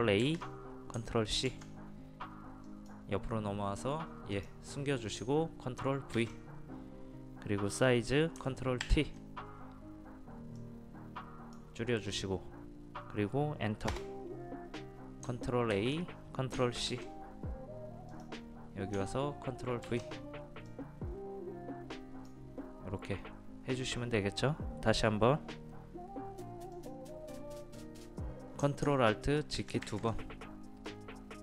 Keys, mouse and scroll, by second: 0.3 ctrl+a, 1.5 ctrl+c, 2.7 click, 6.2 ctrl+v, 8.8 ctrl+t, 10.6-12.3 drag, 13.9 Return, 15.8 ctrl+a, 16.9 ctrl+c, 18.1 click, 20.7 click, 29.6 ctrl+alt+z, 29.9 ctrl+alt+z, 30.9-31.4 drag.